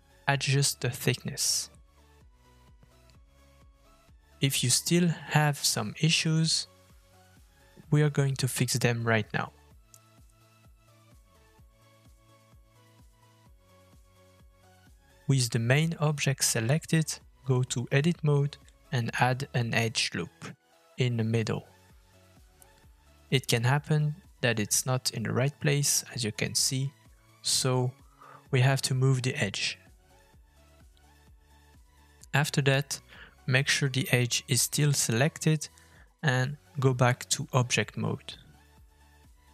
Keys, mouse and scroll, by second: 0.1 middle click, 14.2 scroll up 1, 14.4 shift+middle click, 16.2-16.5 scroll down 3, 16.5 shift+middle click, 17.5 Tab, 18.3 scroll down 3, 18.7 shift+middle click, 21.1 ctrl+r, 25.3 Tab, 28.0 middle click, 29.9 Tab, 32.0 g, 35.8 right click, 37.0 Tab, 38.4 middle click.